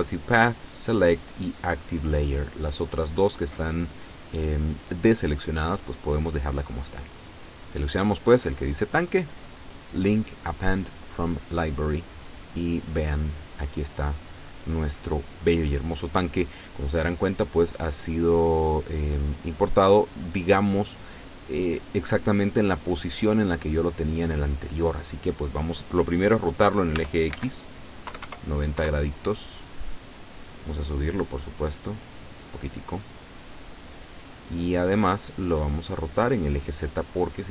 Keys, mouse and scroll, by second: 8.3 click, 11.6 click, 13.3-13.9 scroll down 2, 18.1-21.9 middle drag, 22.2-22.5 scroll up 1, 22.9 scroll down 2, 27.0 r, 27.4 x, 28.2 KP_9, 28.3 KP_0, 28.8 KP_Enter, 31.5-35.0 drag, 35.1-37.0 middle drag.